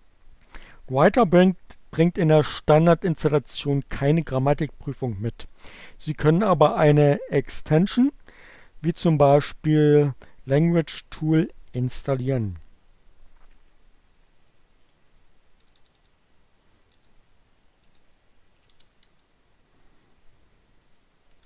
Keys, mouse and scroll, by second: 14.0 click, 14.2 BackSpace, 14.7 BackSpace, 16.8-19.6 typing.